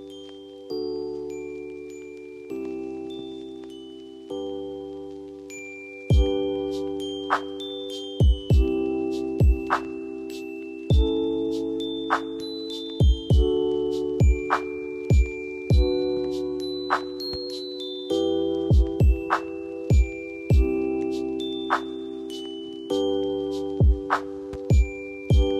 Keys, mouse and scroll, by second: 0.8 click, 3.9 F2, 4.7-12.5 drag, 12.5 space, 12.8 F2, 13.2-14.9 drag, 14.9 space, 16.4-20.6 drag, 20.6 F4, 21.1 space, 21.6 F2, 21.9-23.8 drag.